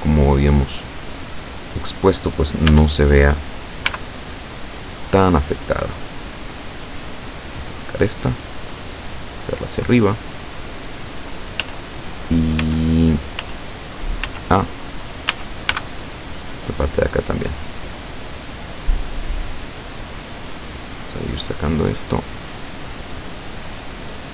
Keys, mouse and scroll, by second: 0.1-1.1 drag, 2.7 a, 3.9 b, 4.3 click, 6.4-7.9 drag, 8.3-9.7 drag, 11.6 z, 12.6 z, 13.4 z, 14.4 z, 15.4 a, 15.8 b, 16.5 click, 17.6-19.1 drag, 19.1 scroll up 1, 19.8 scroll up 1, 19.9-20.6 scroll down 2, 20.9-22.0 scroll down 6, 22.3-22.6 scroll down 2, 23.1 scroll down 2, 24.2-24.3 scroll up 2.